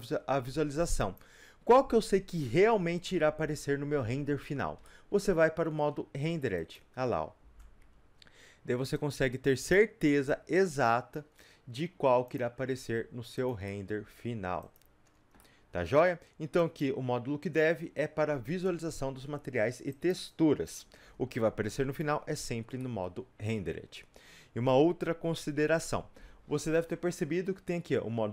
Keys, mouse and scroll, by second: 7.4-7.8 scroll down 2, 7.8 Tab, 8.9-12.4 drag, 11.3 scroll down 1, 12.8 shift+d, 13.5 click, 13.6-14.7 middle drag, 14.0 shift+d, 14.7 click, 15.0 scroll up 2, 15.4-16.5 middle drag, 16.5 click, 19.2 Delete, 20.1 click, 20.4 Delete, 21.1 click, 21.7 click, 22.8-28.3 middle drag.